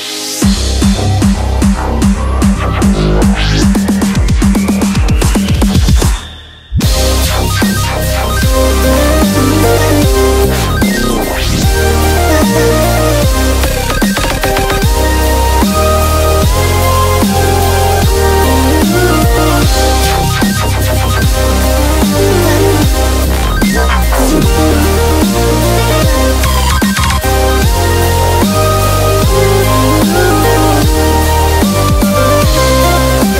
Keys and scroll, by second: 1.7-4.4 typing, 5.6 super+z, 26.5-27.2 typing.